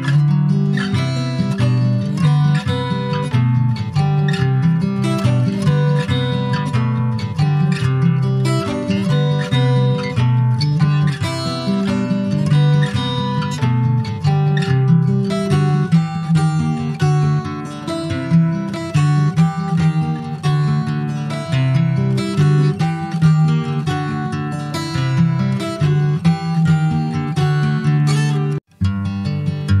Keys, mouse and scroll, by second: 0.1 ctrl+s, 0.8 click, 1.1 scroll down 2, 1.3 middle click, 2.0 shift+click, 2.4 middle click, 3.1 shift+click, 3.4-4.4 middle drag, 4.4 shift+click, 4.8-7.4 middle drag, 9.3 middle click, 9.6-10.6 scroll up 2, 10.6 i, 12.7-14.1 middle drag, 14.1 e, 14.6 alt+s, 15.9 middle click, 16.5 ctrl+b, 18.0 Tab, 18.2 click, 18.6 middle click, 19.0 scroll down 4, 19.3 middle click, 19.7 click, 20.1 middle click, 20.4-20.9 scroll up 2, 20.9 ctrl+s, 20.9 middle click, 21.4-22.1 scroll up 2, 21.7 shift+middle click, 22.1 middle click, 22.4 click, 22.6 Tab, 22.9-23.2 scroll up 3, 23.2 middle click, 23.5-24.1 scroll up 1, 24.1 click, 25.2 2, 25.4 click, 26.0 alt+shift+click, 26.4-26.8 scroll down 2, 27.3 click, 27.9 alt+shift+click, 28.5-29.8 shift+middle drag.